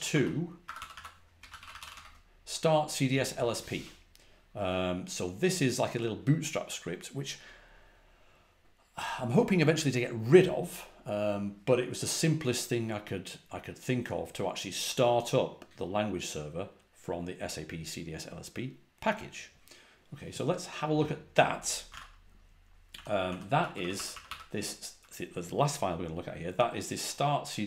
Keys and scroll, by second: 0.0-2.5 typing, 0.6 Escape, 21.6-24.5 typing.